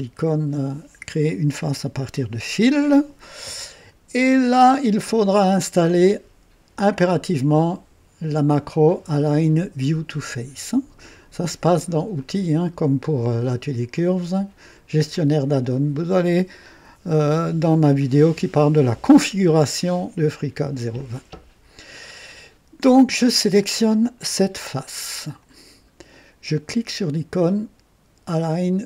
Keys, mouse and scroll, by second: 1.5 click, 3.3-4.6 drag, 12.1 click, 15.6 click, 23.8-24.4 drag, 25.2 click.